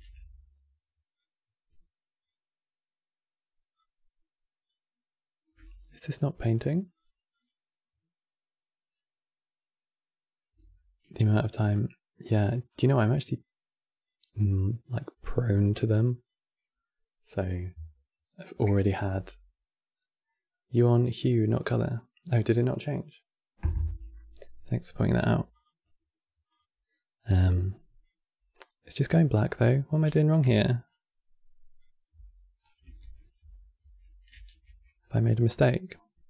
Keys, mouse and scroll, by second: 0.9-6.5 drag, 6.6-10.0 drag, 10.1-10.4 scroll up 4, 10.4 shift+middle click, 11.0 scroll down 3, 11.4-18.5 drag, 25.2-28.3 drag, 28.3-30.1 scroll up 5, 30.1 x, 30.6-31.8 drag, 31.8 x, 32.4-32.8 scroll down 3, 32.8 ctrl+z, 33.2 ctrl+z, 33.6 ctrl+z, 34.1 ctrl+z, 34.7-36.2 scroll down 2.